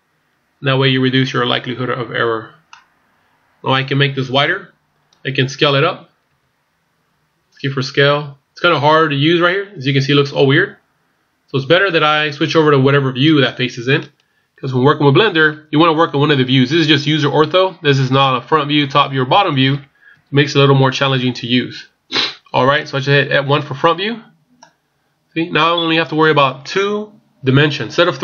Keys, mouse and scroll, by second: 2.2-2.7 scroll down 1, 2.7 middle click, 6.4 s, 17.8 scroll down 1, 18.2 middle click, 20.1 KP_1, 25.0 scroll up 1, 25.5 scroll down 1.